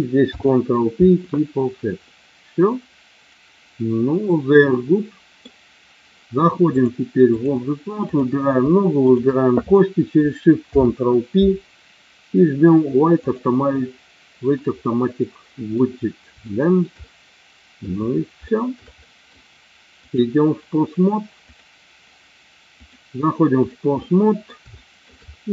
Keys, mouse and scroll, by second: 0.2 ctrl+p, 2.0-5.3 middle drag, 6.7 click, 8.0 click, 9.0 shift+click, 10.7 ctrl+p, 14.7 middle click, 16.4 shift+middle click, 17.1 middle click, 18.5 shift+middle click, 19.0 middle click, 20.0 click, 21.5 click, 22.7-23.7 drag, 24.0 middle click, 24.7 shift+middle click.